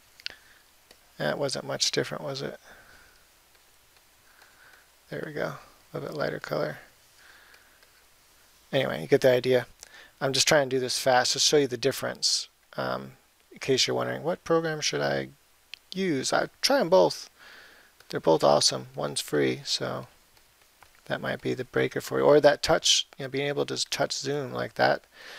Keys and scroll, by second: 10.9 [.